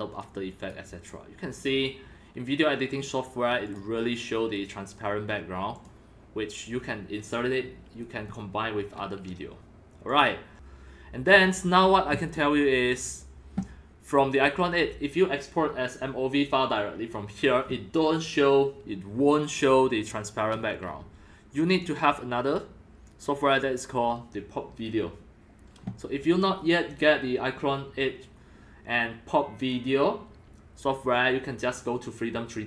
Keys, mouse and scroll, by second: 0.1 click, 0.7 click, 3.6 click, 4.6-10.0 drag, 10.1 click, 11.3 click, 12.0 click, 12.2-13.4 drag, 13.5 click, 15.6-18.0 drag, 21.7 click, 21.8-27.0 drag.